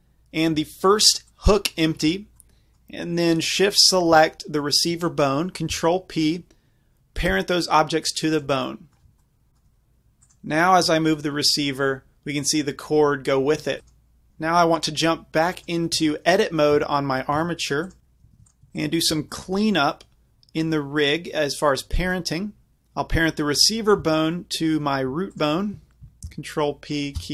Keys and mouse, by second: 1.3-3.3 drag, 3.8-5.7 drag, 5.7 ctrl+p, 8.4 click, 10.3 click, 10.9 g, 11.2 drag, 14.0 right click, 15.6-18.7 right drag, 16.1 Tab, 16.8 a, 17.4 Tab, 18.4 ctrl+Tab, 18.8 right click, 19.4-24.6 drag, 25.4-27.3 drag, 26.3 ctrl+p.